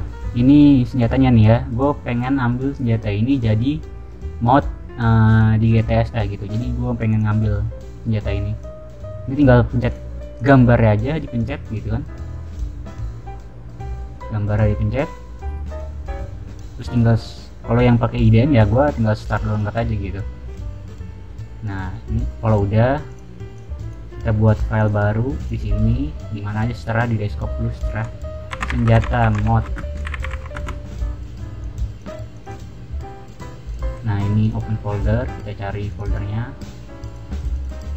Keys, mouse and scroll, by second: 0.9 middle click, 1.3 middle click, 2.9-3.3 middle drag, 7.0 click, 9.8 click, 13.8 middle click, 18.2-18.6 drag, 19.4 click, 23.0 drag, 23.5 click, 24.5 click, 24.7 click, 25.3 click, 28.2-30.2 typing, 30.5 Return, 31.5 click, 32.3 click, 32.4 click, 33.6 click, 34.3 click, 35.8 click, 37.0 click, 37.3 click, 37.5 click.